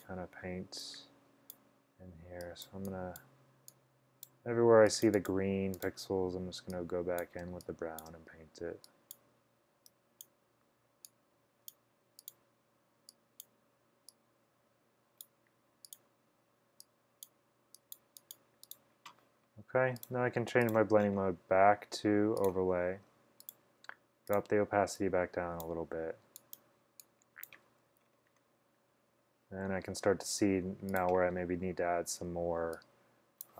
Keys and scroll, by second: 7.5 space, 8.0 space, 32.3 b.